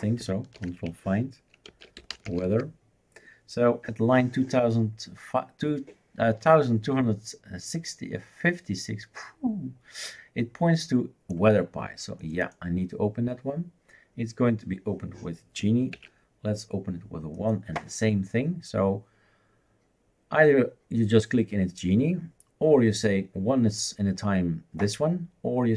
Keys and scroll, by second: 0.6 ctrl+f, 1.5-3.0 typing, 16.0 shift+super+q.